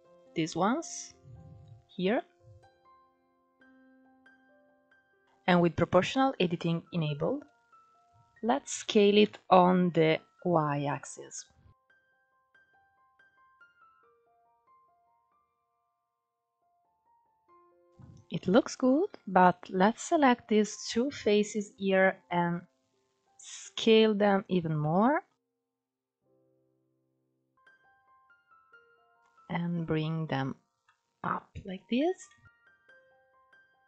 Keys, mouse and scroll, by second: 0.9-1.6 scroll up 1, 1.6 scroll down 3, 1.8-2.9 middle drag, 2.9 alt+z, 3.5-5.2 shift+middle drag, 8.4 s, 11.0 middle click, 11.9 ctrl+z, 12.1 middle click, 12.4 ctrl+z, 12.6 click, 13.1 middle click, 13.3 s, 14.8 middle click, 15.5 click, 15.7 middle click, 15.9 Tab, 16.0 scroll down 2, 16.1 middle click, 16.6 scroll up 5, 16.9 scroll down 3, 17.1 middle click, 17.3 scroll up 3, 17.4 middle click, 17.6 Tab, 17.7 middle click, 17.8-18.7 scroll up 2, 18.7 ctrl+3, 19.1 click, 19.8 shift+click, 20.1 scroll down 2, 20.3-21.5 middle drag, 21.5-22.4 scroll up 2, 22.4 s, 24.4 scroll down 2, 24.5-25.5 middle drag, 25.5 KP_1, 26.4-27.3 scroll up 1, 27.3 click, 28.9 click, 30.4 scroll down 4, 30.5-31.5 middle drag, 31.5 Tab, 31.8 scroll down 1, 31.9-32.6 middle drag, 32.6 scroll up 4, 32.7 Tab, 32.8 middle click, 33.3 KP_1, 33.8 Tab.